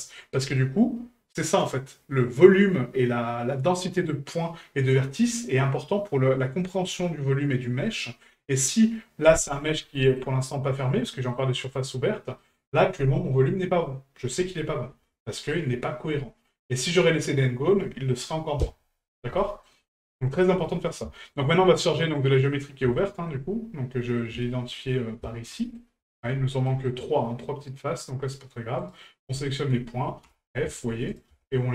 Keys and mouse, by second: 9.9 middle click, 11.2 middle click, 12.4 middle click, 19.4 middle click, 20.6 middle drag, 21.2 shift+middle drag, 22.1-22.8 middle drag, 23.0-23.3 shift+middle drag, 23.9 middle drag, 24.4 shift+middle drag, 25.2 shift+middle drag, 25.6 middle click, 26.0 shift+middle drag, 26.7 middle drag, 28.8 right click, 29.5 shift+right click, 31.1 right click.